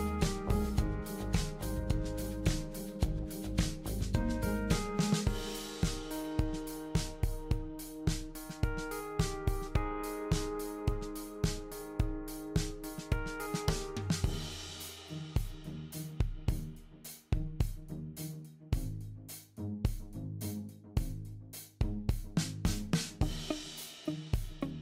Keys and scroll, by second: 0.3-1.0 typing, 2.2-3.7 typing, 6.6-7.3 typing, 8.4-9.4 typing.